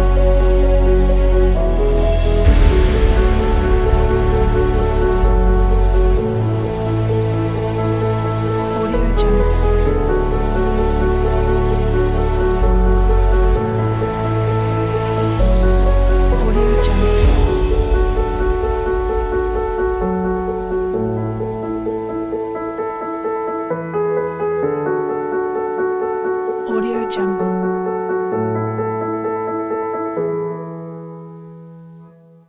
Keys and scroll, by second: 28.0 shift+super+h.